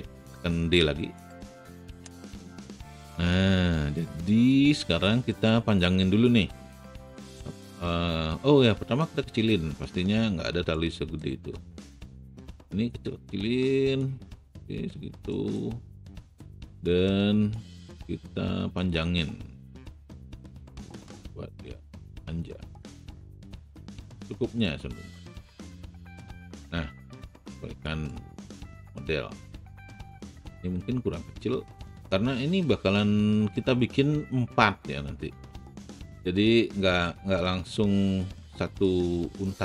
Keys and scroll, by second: 6.9 alt+r.